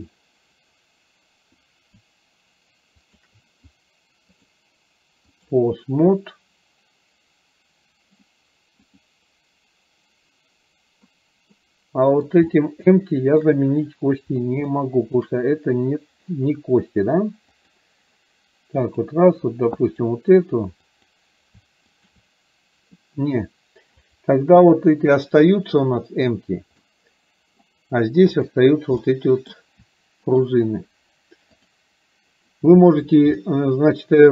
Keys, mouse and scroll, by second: 3.0 shift+click, 4.5-5.6 drag, 9.0 click, 11.6-12.4 middle drag, 11.6-12.2 scroll up 1, 12.6-13.6 shift+middle drag, 14.9-15.2 shift+middle drag, 17.6 click, 19.1 click, 19.9 click, 20.9-21.4 drag, 22.0 shift+click, 24.1 click, 26.0 click, 27.0 middle click, 28.5 click, 29.0-29.6 middle drag, 30.4 shift+click, 31.7 click, 33.5-34.3 shift+middle drag.